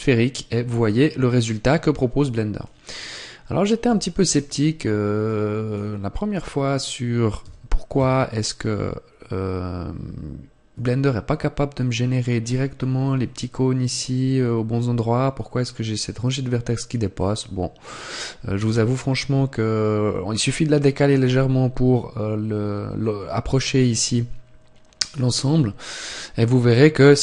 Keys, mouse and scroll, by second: 5.2 click, 7.3 g.